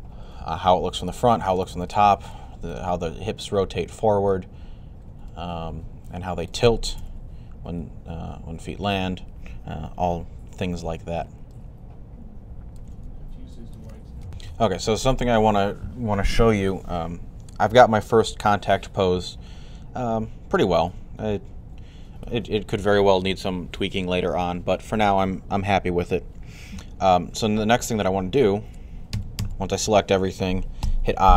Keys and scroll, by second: 6.8 1, 14.2 typing, 28.7-29.5 typing, 30.6 typing.